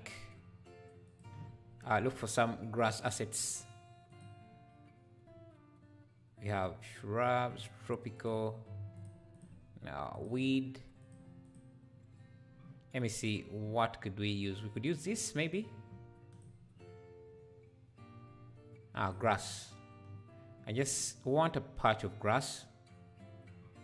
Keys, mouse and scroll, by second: 3.0-8.3 drag.